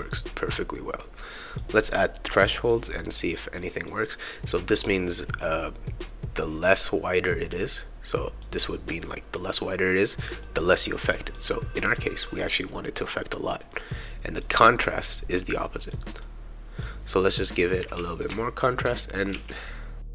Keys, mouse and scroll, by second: 1.3 click, 2.1-3.4 right drag, 3.6-4.9 drag, 7.6 click, 10.4-12.9 drag, 13.8 click, 15.3 click, 16.2 click, 17.2-20.1 right drag, 18.0-20.1 typing.